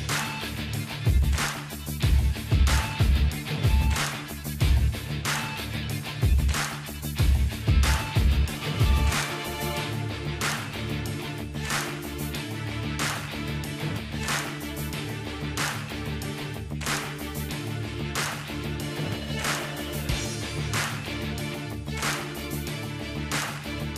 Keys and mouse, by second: 0.4 ctrl+i, 0.6 h, 1.0 click, 1.1 Tab, 1.3-3.6 middle drag, 3.8 KP_7, 4.7-5.8 drag, 7.2-11.0 drag, 11.0-12.1 middle drag, 12.1-13.1 drag, 13.1-15.6 middle drag, 13.4-15.0 drag, 16.6-17.6 drag, 17.1-18.3 middle drag, 18.3-19.8 drag, 19.1-20.8 middle drag, 21.8-23.0 drag, 22.6 ctrl+b.